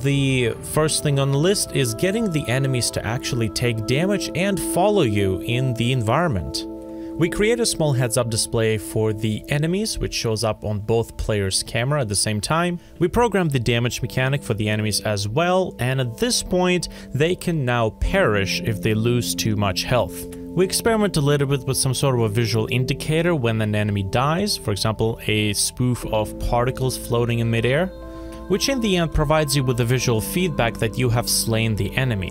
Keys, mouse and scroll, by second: 0.9 v, 1.3 e, 4.5 e, 6.3 f, 6.4 ctrl+shift+a, 6.8 middle click, 26.8-28.6 alt+drag, 27.0 alt+F4.